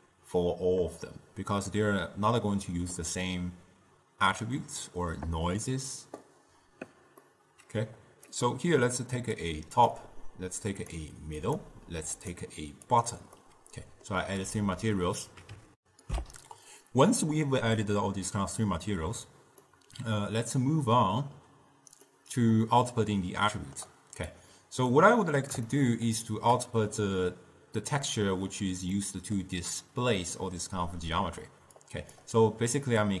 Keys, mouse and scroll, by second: 7.4-8.4 middle drag, 8.4-13.5 drag, 13.5-15.8 middle drag, 15.8 ctrl+alt+shift+w, 16.9 ctrl+alt+shift+q, 19.7-24.4 middle drag, 24.4 click, 25.8-28.8 shift+middle drag, 29.0-31.9 middle drag, 31.9-33.2 drag.